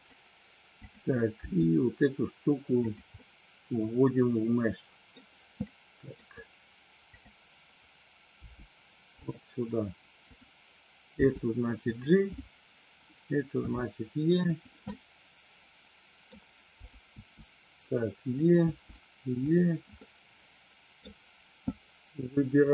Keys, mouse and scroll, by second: 0.7 click, 1.3 g, 2.9 click, 3.2-5.2 middle drag, 5.7 scroll up 1, 5.7 middle click, 7.1 click, 8.5 g, 9.1 click, 11.1 g, 11.9 click, 13.6 e, 14.5 click, 15.1-16.3 middle drag, 16.7 click, 17.3 e, 18.3 click, 18.6 e, 19.5 click, 20.0-21.1 middle drag, 21.7 click.